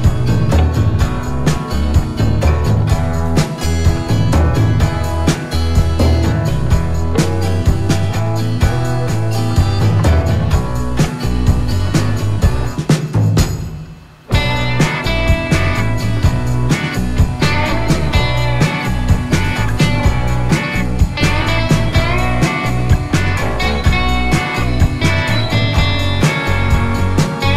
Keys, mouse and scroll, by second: 2.9 click, 6.7 scroll up 1, 8.5 click, 9.5 alt+scroll up 2, 10.1 space, 10.4 click, 10.5 space, 11.3 click.